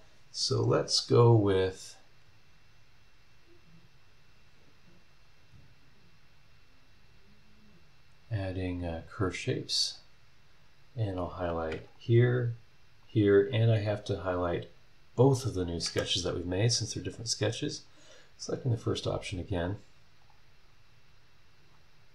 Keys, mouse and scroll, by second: 1.6 click, 9.0 click, 10.1 scroll up 1, 10.7 scroll down 1, 11.8 ctrl+click, 13.0 ctrl+click, 14.3 ctrl+click, 15.3 ctrl+click, 17.7 click, 20.2 click, 21.6 scroll down 2.